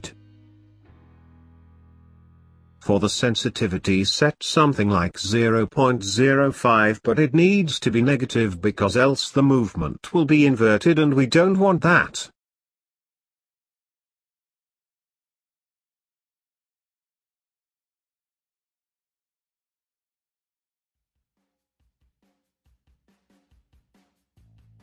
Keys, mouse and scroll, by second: 2.9-5.9 drag, 6.6 click, 8.6-12.3 drag, 15.5-17.3 drag, 19.1 click, 21.6 click, 23.9 click.